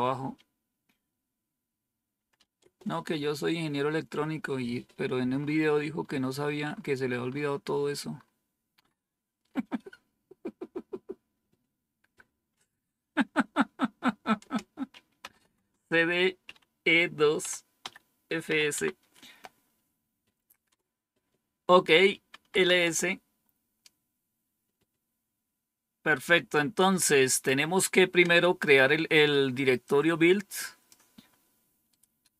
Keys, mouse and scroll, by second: 1.9-2.8 typing, 14.3 Return, 14.9-18.4 typing, 18.6 Tab, 20.6 Return, 22.2-22.9 typing, 29.7-30.8 drag, 31.8-32.3 right drag.